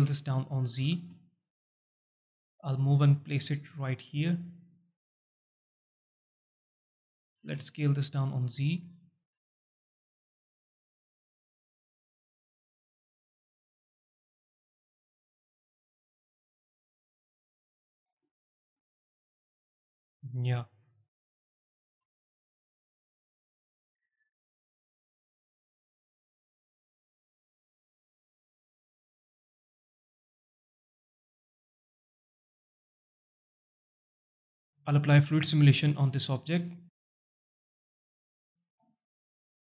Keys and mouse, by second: 0.6 click, 1.2 alt+shift+middle drag, 2.0 click, 3.6 click, 5.6 click, 6.6 s, 7.2 s, 7.3 z, 8.4 click, 9.0 alt+shift+drag, 10.0-11.6 drag, 12.3 s, 12.5 x, 13.2 click, 14.3 click, 15.6 ctrl+z, 16.5 click, 17.4 s, 19.2 click, 21.8 s, 21.9 z, 23.4 click, 24.4-29.3 drag, 30.9 alt+shift+middle drag, 31.4 alt+shift+middle drag, 31.9-32.5 alt+drag, 33.1 alt+shift+drag, 33.8 alt+shift+drag, 35.6 click, 36.2 click, 39.5-39.6 drag.